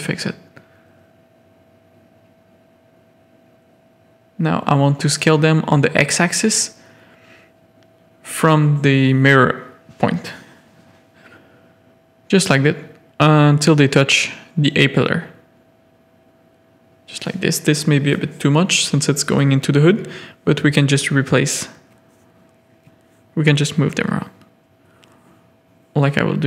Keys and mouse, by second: 0.8 alt+click, 2.5 s, 7.0 s, 11.0 s, 15.4 s, 19.6 alt+click, 20.7 KP_3, 22.3 z, 23.8 middle click, 24.9 z, 25.9 middle click.